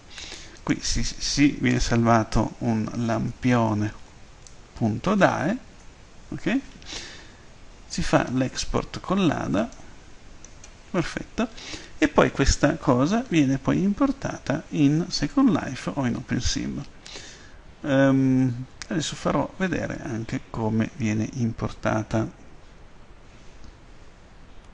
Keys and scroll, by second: 2.7-5.5 typing, 5.7 Tab, 24.6 F10.